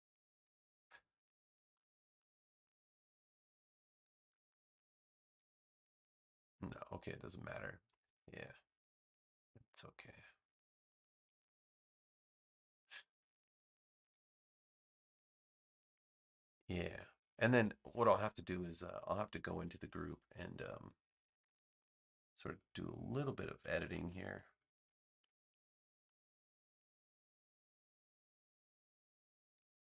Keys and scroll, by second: 17.9 a, 23.7 super+z.